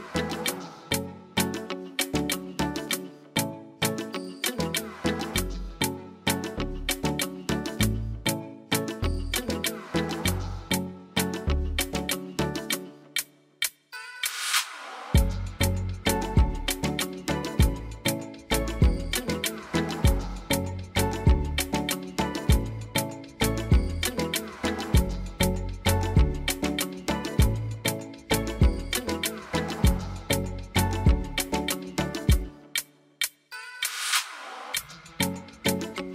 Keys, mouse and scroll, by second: 1.2 click, 3.4 click, 5.7 click, 6.3 click, 6.8 click, 7.9 click, 11.1 click, 12.1 click, 12.7 click, 13.2 click, 13.7 click, 14.2 click, 15.5 click, 17.4 click, 19.1 click, 20.6 click, 28.2 click, 29.1 click, 29.8 click, 35.2 click.